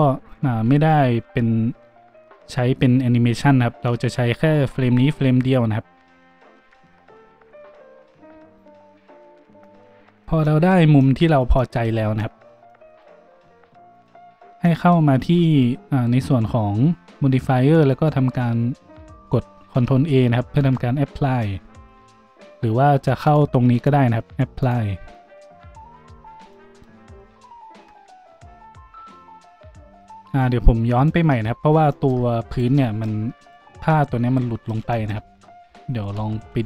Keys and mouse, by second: 14.1-22.3 middle drag, 20.6 ctrl+a, 22.3 click, 22.5 middle click, 23.3-32.4 drag, 32.4 middle click, 32.5-33.3 drag, 33.3 middle click, 33.4-36.6 drag, 35.2 ctrl+z, 35.6 ctrl+z.